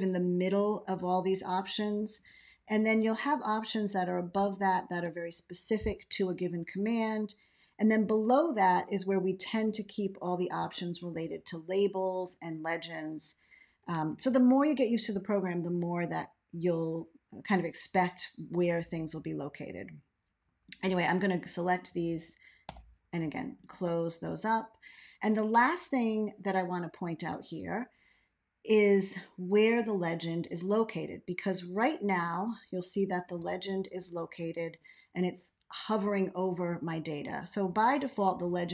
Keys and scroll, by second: 4.1 ctrl+a, 9.3 ctrl+a, 14.0 ctrl+x, 22.6 Left, 32.0 ctrl+a.